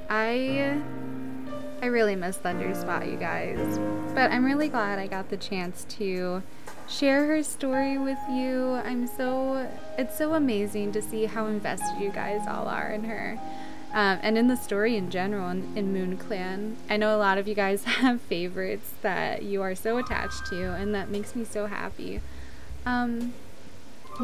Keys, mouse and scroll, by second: 19.9 right click.